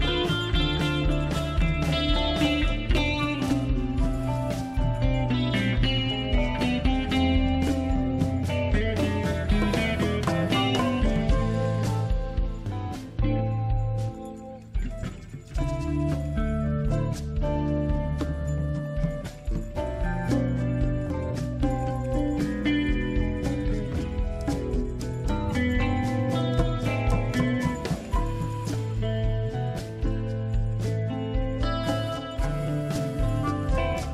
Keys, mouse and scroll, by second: 0.8 click, 2.5 click, 4.0-5.1 scroll down 2, 5.1-6.4 scroll up 2, 6.4-6.8 scroll down 1, 9.6 click, 13.6 click, 18.1 click, 23.2 click, 26.6 click, 28.0 click, 33.8 click.